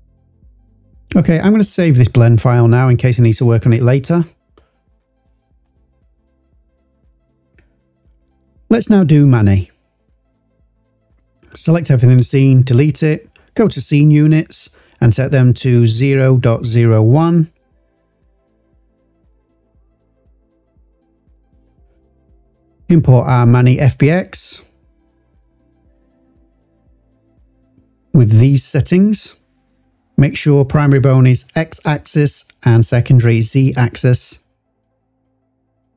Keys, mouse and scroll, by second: 1.9-2.9 drag, 9.1-10.2 drag, 11.5 a, 12.8 x, 14.8 click, 15.5-18.1 drag, 16.3 BackSpace, 18.9 scroll down 2, 19.8-20.1 scroll down 4, 20.9 click, 21.8-23.4 drag, 35.6 click.